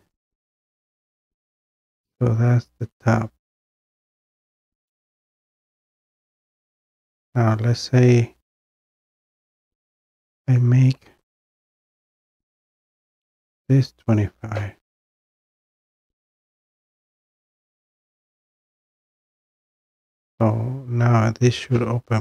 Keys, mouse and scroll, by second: 1.4-2.1 scroll down 1, 2.1-3.1 scroll down 1, 8.7 click, 8.9 click, 13.0-13.5 typing, 15.9 click, 18.8 click.